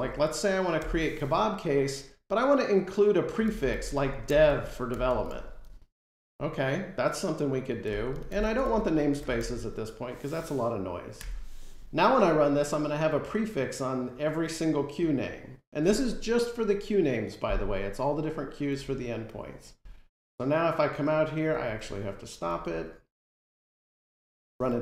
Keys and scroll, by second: 0.7 Return, 3.8 Return, 24.1 F5.